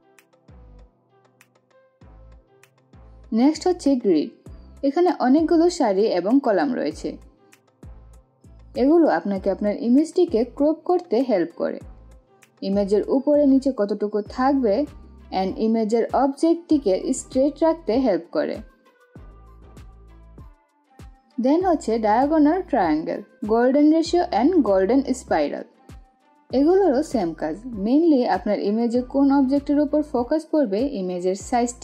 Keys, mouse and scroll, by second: 2.6 click, 3.4 right click, 4.7-20.1 drag, 27.8-31.8 drag.